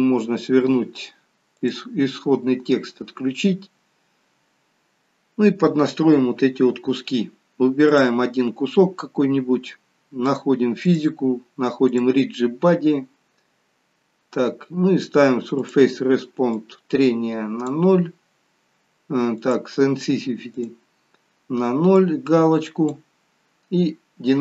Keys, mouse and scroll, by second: 1.5 click, 7.8 click, 10.8 click, 11.8 click, 12.9-13.7 scroll down 3, 14.0-14.6 scroll down 1, 14.6-15.6 scroll down 4, 15.6 click, 16.8 click, 19.3 click, 19.3-19.8 scroll down 3, 20.6 click, 21.1-21.9 scroll down 2, 21.9 click, 23.3-24.2 scroll down 2.